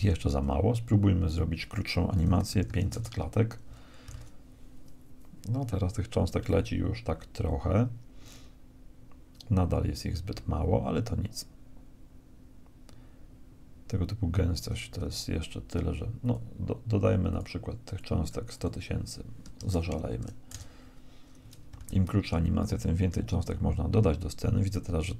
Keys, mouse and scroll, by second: 0.8-2.7 drag, 2.3 0, 3.7 alt+a, 14.6 Escape, 15.8-17.5 drag, 21.3 alt+a.